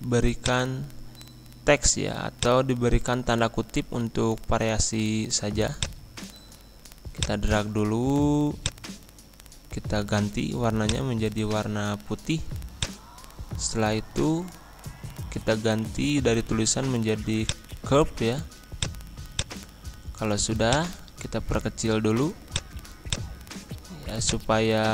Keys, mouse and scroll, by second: 3.9 shift+', 5.7-10.8 drag, 17.4-24.9 drag.